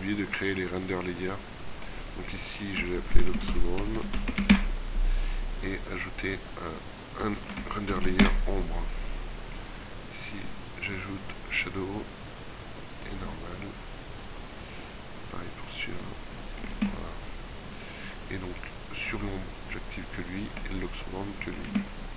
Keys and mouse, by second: 16.8 ctrl+w, 21.7 ctrl+w.